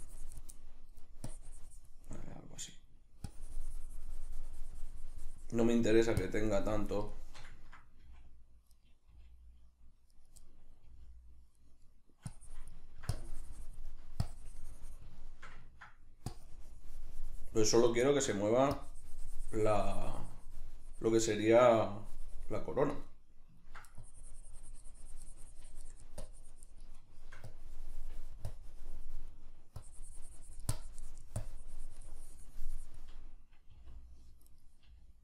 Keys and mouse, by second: 0.5 middle click, 1.2 click, 2.1 middle click, 2.7 right click, 3.3-7.1 drag, 7.1-8.9 shift+middle drag, 8.1 f, 8.9 right click, 9.1 g, 10.3 right click, 10.5-11.7 middle drag, 10.9 g, 11.7 right click, 12.3 click, 12.9 ctrl+middle click, 13.1 click, 13.9 middle click, 14.3 click, 15.2-16.3 shift+middle drag, 16.3-18.1 drag, 18.1 ctrl+middle click, 18.8-23.1 drag, 23.1 middle click, 24.0-27.1 drag, 27.1 shift+middle click, 27.5-29.3 drag, 29.3 middle click, 29.8-34.6 drag, 33.7 r, 34.6 right click, 34.8 g.